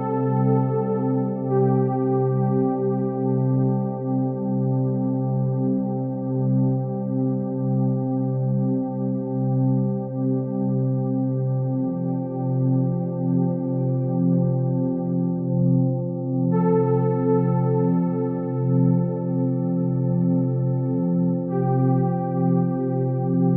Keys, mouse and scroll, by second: 0.4 shift+a, 4.2 s, 5.7 g, 7.4-8.7 drag, 8.7 0, 9.7-10.1 scroll down 3, 10.1 s, 10.8 g, 12.4 s, 13.6 s, 14.4 KP_3, 15.7 shift+d, 17.4 r, 19.1 KP_7, 19.9-20.3 scroll down 2, 20.3 r, 20.8 g, 22.0 shift+d, 23.0 r.